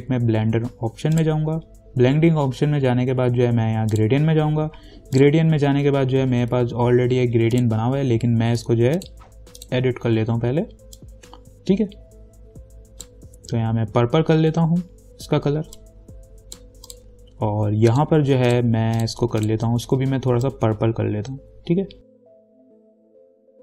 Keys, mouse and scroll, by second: 1.4 click, 4.2 click, 7.8-16.0 drag, 16.0 click, 17.1-23.6 drag.